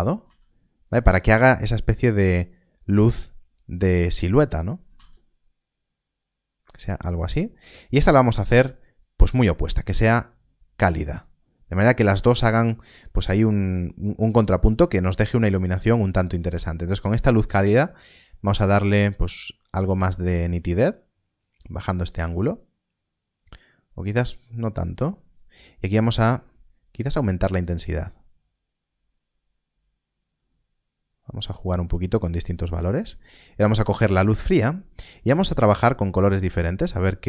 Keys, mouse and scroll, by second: 0.8 z, 0.8 click, 4.8 r, 5.0 z, 6.6 click, 18.1 click.